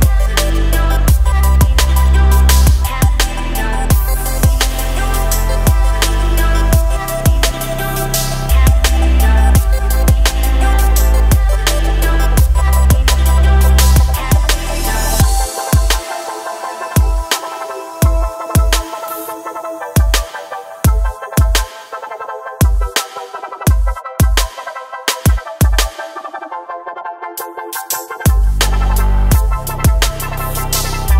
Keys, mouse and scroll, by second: 0.0 middle click, 0.1-3.6 typing, 1.1 scroll down 5, 1.5 shift+middle click, 2.1 shift+middle click, 2.7 shift+middle click, 3.4 shift+middle click, 4.9 shift+middle click, 5.4 ctrl+r, 5.7 KP_Decimal, 5.8-6.3 scroll down 14, 6.3 shift+middle click, 6.4 scroll up 2, 6.5 shift+middle click, 6.8 middle click, 7.1 ctrl+r, 7.5 ctrl+r, 7.7 click, 8.1 KP_1, 8.2 scroll down 7, 8.4 scroll up 2, 8.5 e, 8.9 middle click, 9.1 click, 9.5 shift+click, 9.6 f, 9.8 shift+middle click, 10.0 click, 10.2 shift+click, 10.4 KP_1, 10.6 e, 10.9 middle click, 11.1 1, 11.1 shift+click, 11.4 alt+m, 11.8 click, 11.9 shift+click, 12.1 alt+m, 12.5 click, 12.6 middle click, 12.7-14.5 typing, 13.4 shift+click, 13.6 click, 13.7 shift+click, 15.0-15.5 scroll down 3, 15.3 alt+click, 15.5 shift+middle click, 15.7 s, 16.1 scroll up 1, 16.4 scroll down 1, 16.6 middle click, 16.9 shift+click, 17.2 shift+click, 17.3 middle click, 17.4 shift+click, 17.6 shift+middle click, 17.8 shift+click, 18.0 shift+click, 18.1 shift+middle click, 18.4 KP_1, 18.5 scroll up 2, 18.7 s, 19.4 click, 19.6 click, 19.7 g, 20.1 click, 20.3 g, 21.0 scroll down 1, 21.1 shift+middle click, 21.2 scroll up 1, 21.3 click, 21.5 g, 22.1 scroll down 3, 22.2 shift+middle click, 22.3 scroll up 2, 22.5-23.7 typing, 22.7 click, 25.2 e, 26.0 click, 26.1 click, 26.2 g, 27.1 ctrl+r, 27.2-28.8 typing, 28.1 shift+middle click, 31.0 scroll up 1, 31.0 shift+middle click.